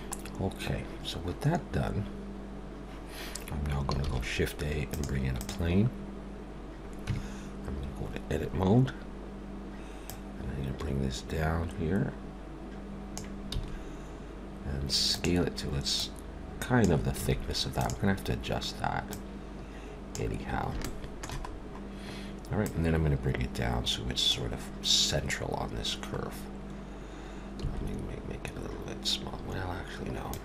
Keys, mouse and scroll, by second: 0.3 scroll up 1, 4.0 shift+a, 7.1 Tab, 10.1 click, 13.5 s, 16.0 click, 17.2 s, 19.1 click, 20.8 shift+middle click, 21.5-22.1 scroll up 1, 22.1-22.6 scroll up 1, 22.6 click, 26.2-27.6 scroll down 3, 27.6 s.